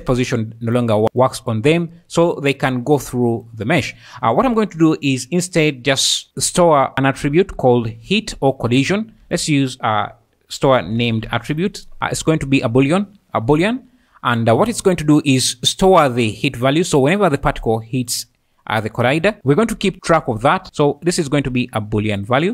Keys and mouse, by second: 1.9 middle click, 9.2 shift+a, 13.8 `, 17.2 click, 21.2-22.3 drag.